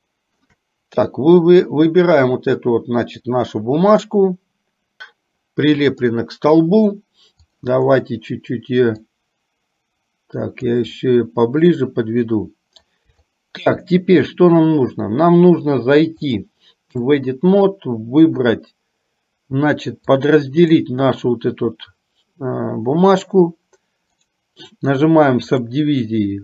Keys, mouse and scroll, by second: 0.0 shift+middle click, 5.0-6.1 middle drag, 7.5 click, 9.2-10.8 drag, 11.0-13.0 middle drag, 13.2 shift+middle click, 16.5 click, 20.2 click, 24.3-25.8 right drag.